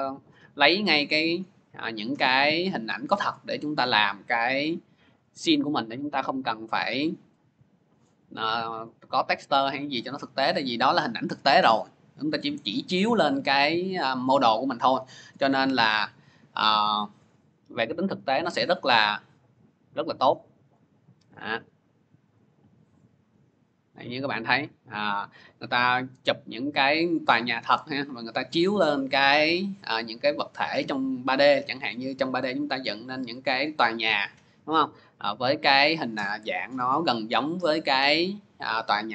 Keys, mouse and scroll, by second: 0.0 click, 1.2 click, 2.1 scroll, 3.8 scroll, 4.9 click, 5.2 scroll down 3, 7.0 scroll down 1, 7.0 scroll, 8.2 click, 9.7 scroll, 9.8 middle click, 12.6 middle click, 12.6 middle click, 12.7 middle click, 13.1 scroll, 15.3-17.2 drag, 19.3 click, 20.4 click, 20.5 click, 21.4 click, 22.3 click.